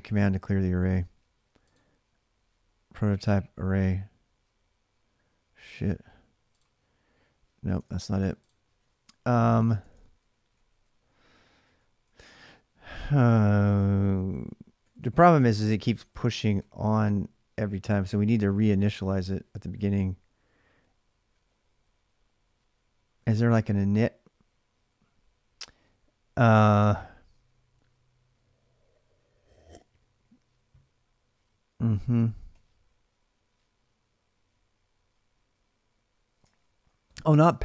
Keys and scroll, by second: 0.0-0.8 typing, 7.5 alt+Tab, 9.7 ctrl+[, 9.9 k, 10.0 k, 11.2-12.6 typing, 14.6-16.8 typing, 15.3 ctrl+[, 15.4 ctrl+j, 18.8-19.7 typing, 32.3 o, 36.1-37.6 typing.